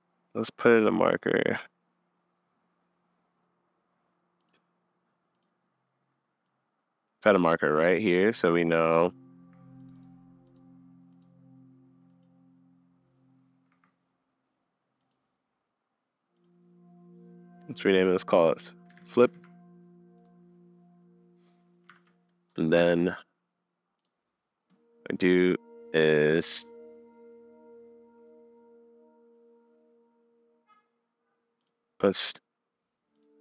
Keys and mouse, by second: 8.0-8.7 middle drag, 8.7 middle click, 10.5 middle click, 11.3 middle click, 13.8 middle click, 15.1-16.8 drag, 21.9 super+s, 33.1 click.